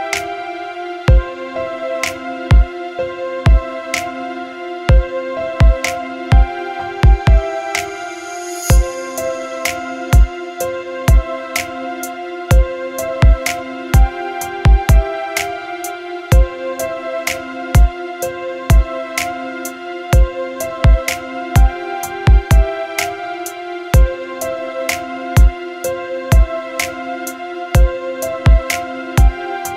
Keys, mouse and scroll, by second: 0.6 click, 1.8 click, 10.2-13.1 drag, 14.9-18.0 drag, 18.4-29.7 drag.